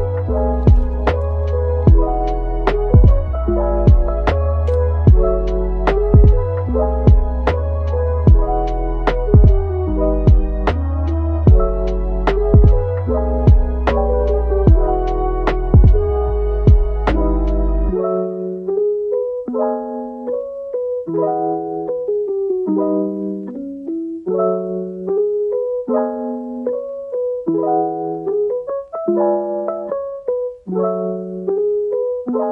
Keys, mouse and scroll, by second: 0.0-0.6 typing, 2.2 typing, 3.6 middle click, 5.3 Tab, 6.0 scroll, 6.0-7.3 scroll down 1, 7.3 scroll up 1, 8.3 middle click, 9.1 Tab, 11.7 typing, 13.2 typing, 14.2 typing, 18.1 typing, 20.5 typing, 22.6 typing, 25.0 right click, 25.4 typing, 26.8 typing, 29.4 typing, 30.7 typing, 32.3 ctrl+b.